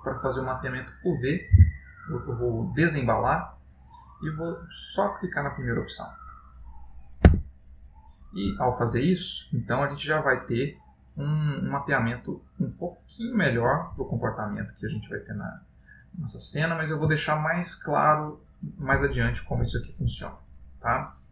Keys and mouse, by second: 1.8 u, 7.6 Tab, 9.9 click, 12.5 click, 14.1 middle click, 17.4 ctrl+middle click.